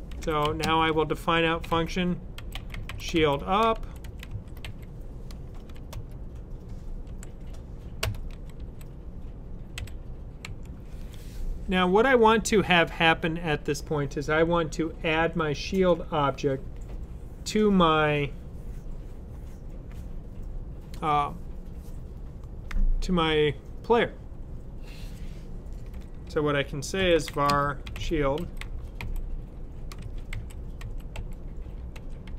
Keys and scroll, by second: 0.0-5.4 typing, 7.0 Down, 10.3 typing, 26.6-32.3 typing.